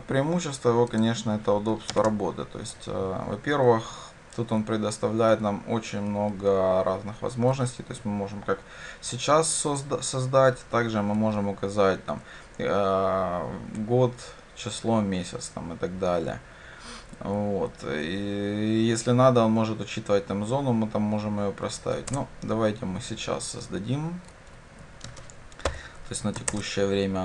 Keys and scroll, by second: 2.0 ctrl+space, 22.2 Return, 26.5 shift+Return.